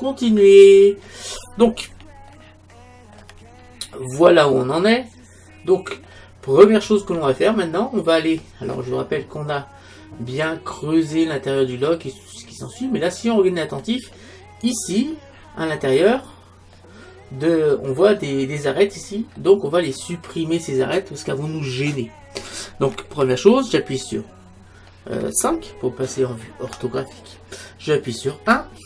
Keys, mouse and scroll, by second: 6.6-10.1 middle drag, 10.4 middle click, 14.8-16.7 right drag, 16.7-18.7 middle drag, 19.4-21.3 middle drag, 26.9 KP_5, 28.5 KP_1.